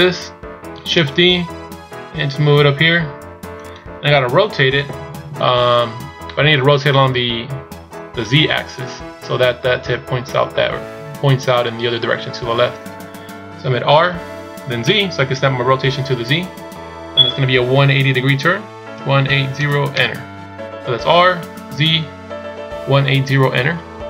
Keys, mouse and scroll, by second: 1.3 shift+d.